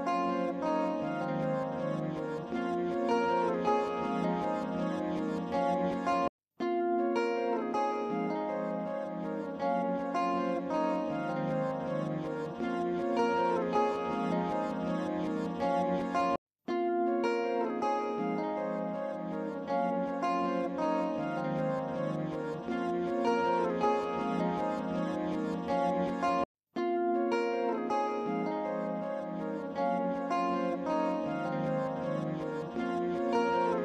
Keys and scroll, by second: 17.0 ctrl+r, 20.8 ctrl+z.